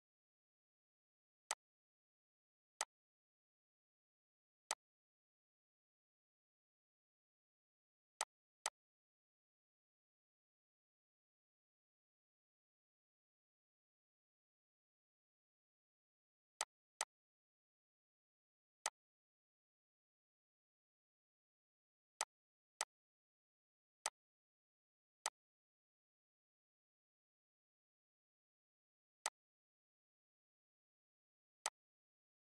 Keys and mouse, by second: 7.9 click, 16.3-28.9 drag, 28.9-32.5 shift+drag.